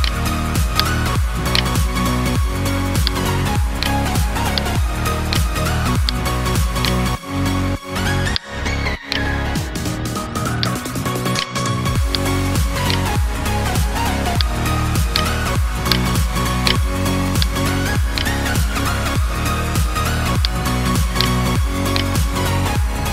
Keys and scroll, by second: 17.2 alt+BackSpace, 18.5 ctrl+d, 22.9 space.